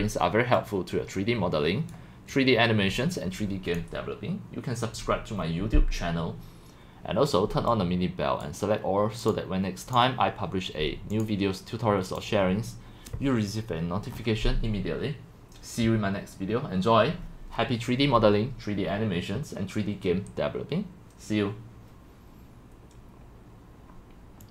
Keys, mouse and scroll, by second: 0.0 middle click, 2.3 click, 3.7 click, 7.3-8.4 drag, 10.1 click, 11.2 click, 12.2 click, 14.1-19.2 scroll down 5.